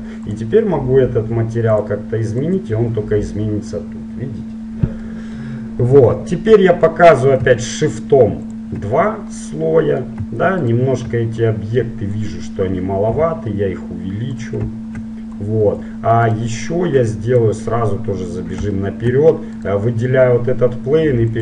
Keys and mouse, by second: 0.3-2.3 drag, 4.5-8.6 middle drag, 8.6-10.5 drag, 10.8-12.6 right drag, 11.6-13.5 drag, 13.5 s, 15.6-18.9 drag, 16.5-18.3 right drag, 18.5 middle click, 19.7-21.4 right drag.